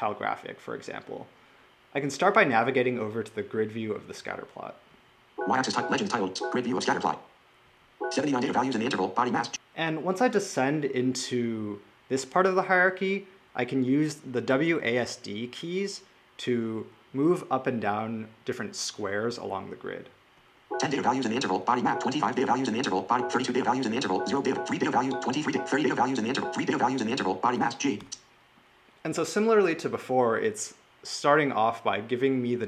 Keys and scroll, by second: 5.0 Right, 5.5 Right, 6.1 Right, 7.7 Down, 20.4 d, 21.6 w, 22.9-26.1 typing.